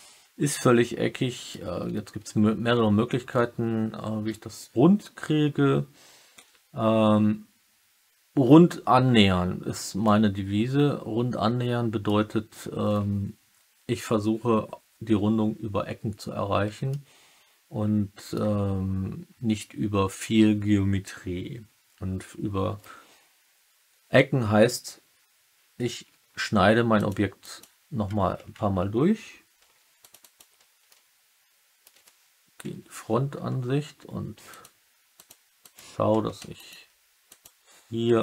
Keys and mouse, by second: 0.4-1.4 alt+middle drag, 10.0-12.0 alt+middle drag, 16.8-18.3 alt+middle drag, 26.3 ctrl+r, 27.3 click, 29.5 ctrl+r, 30.1 click, 30.8 alt+middle click, 32.6 KP_3, 34.4 alt+click, 35.1 alt+click, 35.6 alt+click, 36.0 typing, 38.1 alt+middle click.